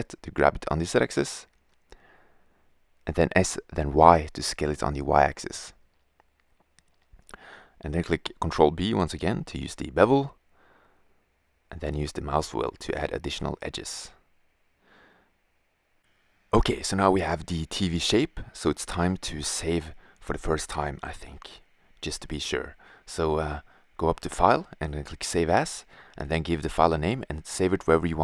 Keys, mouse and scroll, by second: 3.0 s, 6.0-6.6 drag, 6.6 Tab, 7.7 ctrl+b, 15.2-16.7 middle drag, 17.8 middle click, 18.3 Tab, 18.7 middle drag, 26.0 Return.